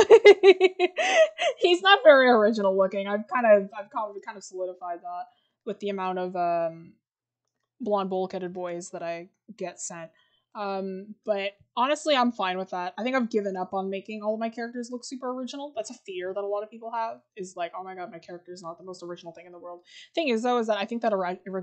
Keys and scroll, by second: 8.8 scroll down 1, 10.0-11.4 scroll up 1.